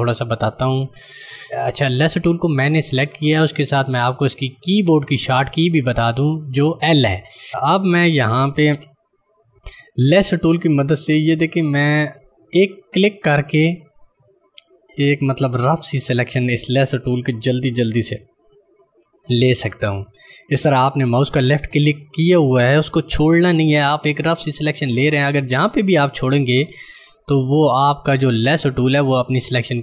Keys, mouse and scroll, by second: 12.5 click.